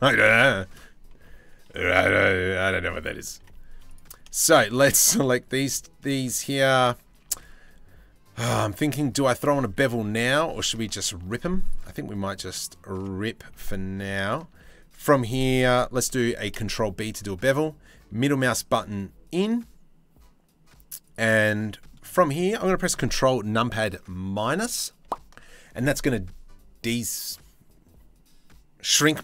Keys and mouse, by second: 0.0 shift+middle click, 1.4 click, 2.9 1, 4.3 shift+click, 4.9 shift+click, 5.2 shift+middle click, 6.8 ctrl+z, 9.9 2, 10.4 alt+click, 12.9 shift+middle click, 15.9 ctrl+b, 21.3 click, 24.6 ctrl+KP_Subtract.